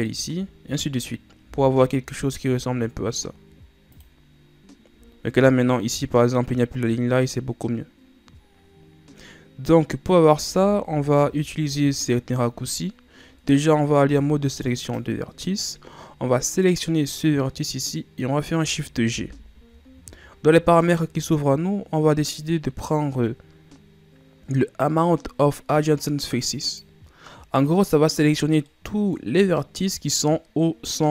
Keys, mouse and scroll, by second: 0.2 shift+right click, 1.6 x, 4.9-5.3 scroll down 1, 5.3-6.7 ctrl+scroll up 2, 10.7 ctrl+z, 11.1 ctrl+z, 14.1 ctrl+Tab, 17.3 right click, 19.2 shift+g, 27.8 scroll down 2, 28.8-29.8 middle drag, 29.8-31.1 scroll up 1.